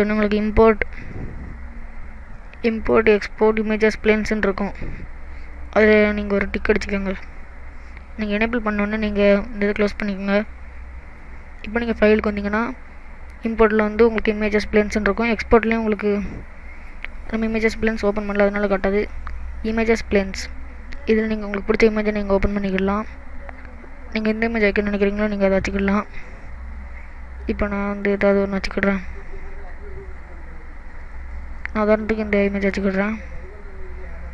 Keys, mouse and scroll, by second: 11.7 click, 33.4 middle click.